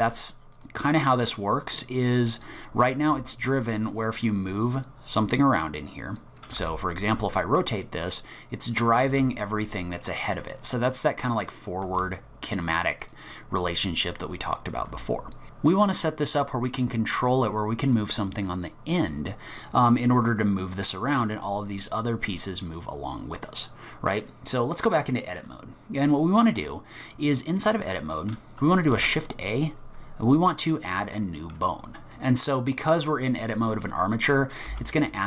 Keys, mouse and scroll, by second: 1.5 click, 2.2 click, 3.0 g, 4.4 click, 4.9 scroll up 4, 5.3 click, 6.6 r, 8.6 click, 9.0 r, 10.4-11.2 scroll down 1, 11.2-11.6 scroll down 3, 11.8 r, 14.1 click, 14.7 r, 20.7-23.8 scroll down 1, 24.7 click, 27.6 click, 28.9 shift+a, 34.7 g.